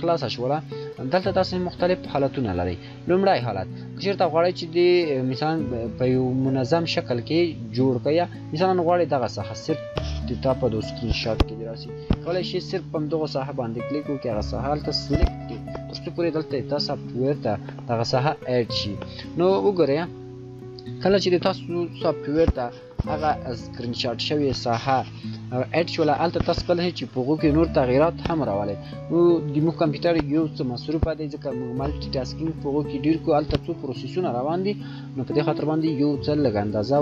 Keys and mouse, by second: 11.3 shift+click, 36.2 shift+click.